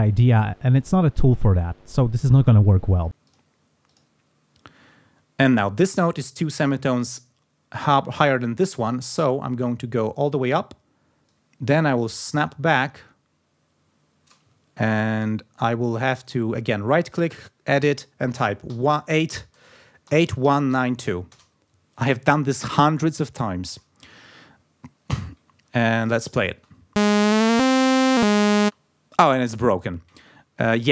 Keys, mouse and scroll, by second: 3.2 click, 3.8 click, 9.4-10.5 drag, 11.2-14.4 drag, 14.5-14.8 ctrl+scroll up 2, 16.1 right click, 17.0 click, 18.6-21.5 typing, 23.3 ctrl+scroll down 2, 25.5 ctrl+click, 25.9 ctrl+click, 26.4 space, 28.5 space, 30.4 ctrl+scroll up 2.